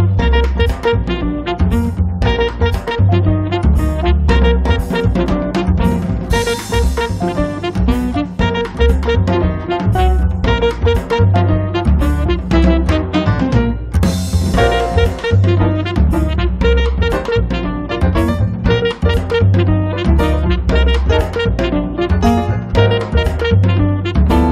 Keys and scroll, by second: 5.4-6.3 typing.